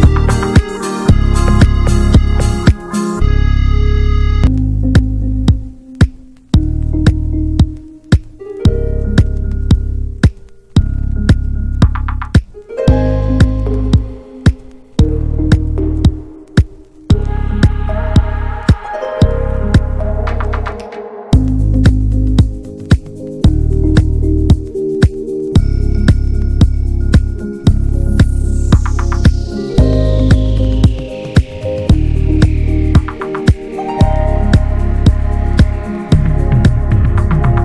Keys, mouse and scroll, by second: 0.2 scroll down 1, 0.3-0.9 shift+middle drag, 0.9-1.2 scroll up 1, 1.2-2.2 shift+middle drag, 2.2 ctrl+b, 5.0-5.6 scroll down 1, 5.6 Tab, 5.7 drag, 6.1 middle click, 6.3 scroll down 1, 6.5-6.9 shift+middle drag, 6.9 click, 7.1-7.7 right drag, 7.7 drag, 7.9 scroll down 1, 8.1-8.4 middle drag, 8.4 click, 9.5 ctrl+1, 9.7 click, 10.4 ctrl+1, 10.6 ctrl+click, 11.0 shift+middle drag, 11.3 drag, 11.4 scroll down 1, 11.7-12.5 middle drag, 12.5 click, 12.7 `, 12.9 click, 13.2-15.3 middle drag, 15.8 Tab, 16.1 alt+z, 16.3-17.0 scroll up 2, 16.5 shift+middle click, 17.0 click, 17.8-18.7 scroll up 1, 18.7-20.0 drag, 20.0-20.5 scroll up 1, 20.5 click, 21.8 scroll down 2, 22.2-22.9 shift+middle drag, 22.9-23.6 scroll up 1, 23.6 click, 24.4 alt+z, 24.7 Tab, 24.8 click, 25.0 scroll down 1, 25.2-27.6 middle drag, 27.6 click, 27.8 ctrl+a, 28.3 alt+middle click, 28.6 alt+middle click, 29.0 ctrl+s, 29.3 shift+middle click, 30.1 scroll up 2, 30.5 ctrl+s, 30.8-31.2 shift+middle drag, 31.2 scroll up 1, 31.6 shift+middle drag, 31.8 scroll up 1, 32.1 click, 32.3 scroll down 4, 32.5 Tab, 32.8 alt+z, 33.1 drag, 33.3 click, 34.3-35.2 scroll up 1, 35.2 click, 36.2 click, 36.6-37.6 drag.